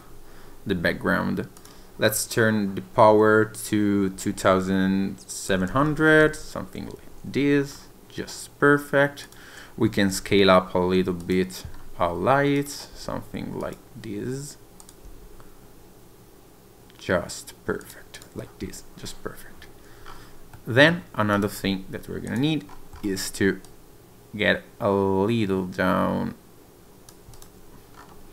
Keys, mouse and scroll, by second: 1.5 click, 5.8 0, 7.7-9.2 scroll up 2, 9.2 click, 10.1 s, 11.2 click, 11.7 scroll down 1, 12.5 click, 12.9 s, 13.6 click, 14.8 click, 15.0 s, 17.8 click, 18.1 click, 20.0-20.5 scroll up 3, 20.5 middle click, 21.3 click, 22.2 click, 22.7-23.0 scroll up 2, 23.6 click, 27.3 click, 27.9-28.3 scroll down 10.